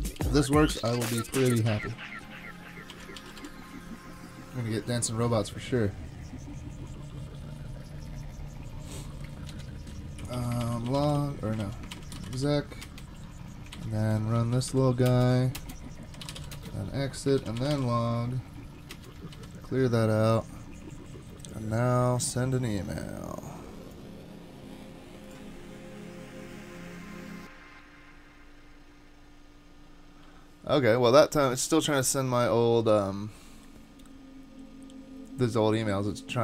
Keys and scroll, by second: 2.9 ctrl+r, 3.0-3.9 typing, 9.5 typing, 10.4 ctrl+c, 10.6 ctrl+r, 10.7-12.8 typing, 11.6 ctrl+c, 13.8 alt+c, 14.5 Down, 14.7 Down, 15.1 Return, 15.2 super+v, 15.6 Return, 15.9-18.9 typing, 17.4 ctrl+r, 18.9 Return, 19.3 super+k.